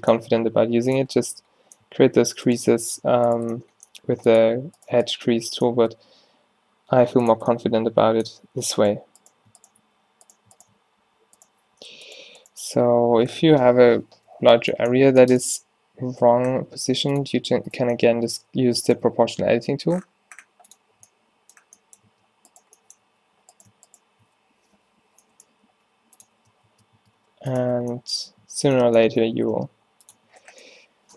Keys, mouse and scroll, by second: 0.3 g, 1.0 Tab, 2.0 Tab, 4.0 g, 6.1 g, 7.4 Tab, 8.4 Tab, 10.0 g, 10.8 g, 11.8 z, 13.1 o, 15.0 z, 15.6 g, 19.3 g, 21.0 Tab, 22.0 Tab, 23.1 z, 24.9 o, 25.7 g, 26.3 z, 26.8 Tab, 27.1 Tab, 27.2 g, 27.7 Tab, 28.5 Tab, 29.1 Tab, 29.4 Tab, 29.7 g, 30.2 Tab.